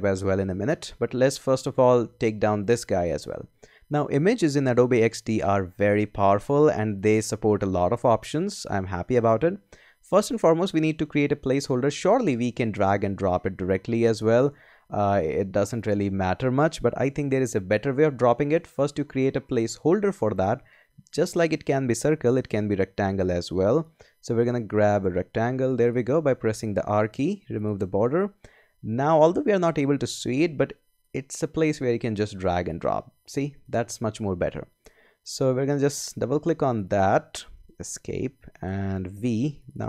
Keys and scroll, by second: 18.1 super+z, 22.3 r, 37.9 Escape, 39.1 v.